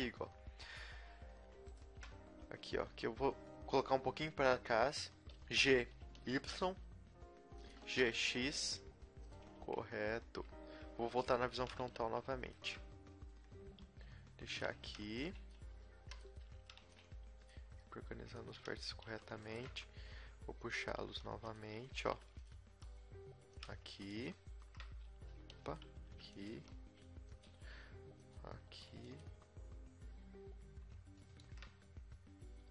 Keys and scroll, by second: 5.6 g, 6.0 g, 7.8 g, 10.0 KP_3, 10.7 KP_1, 11.6 a, 11.9 z, 13.8-17.7 typing, 19.1-22.6 typing, 25.1 r, 25.9 s, 26.5 g, 27.5 e, 28.7 r, 32.6 e.